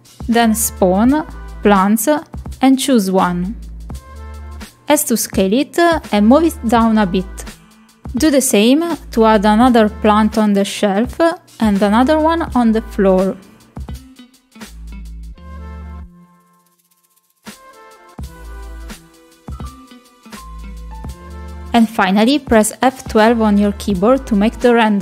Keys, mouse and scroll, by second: 5.3 middle drag, 6.2 middle click, 7.1 s, 7.7 click, 7.9 click, 8.3 middle click, 8.7 middle click, 8.9 shift+right click, 9.2 click, 10.1 s, 10.5 s, 11.1 middle drag, 11.1 s, 11.3 click, 11.6 click, 12.2-14.9 drag, 15.1 middle click, 15.4 middle click, 15.9 shift+middle click, 16.2 s, 16.6 click, 17.3 click, 17.5 r, 18.0 click, 18.4 middle click, 18.8 shift+middle click, 19.0 click, 20.3 click, 20.5 click, 20.9 click, 21.1 middle click, 21.5 ctrl+click, 21.8 shift+click, 22.0-23.1 drag, 23.2 middle click, 23.4 shift+middle click, 23.6 click, 23.8 s, 24.7 middle click.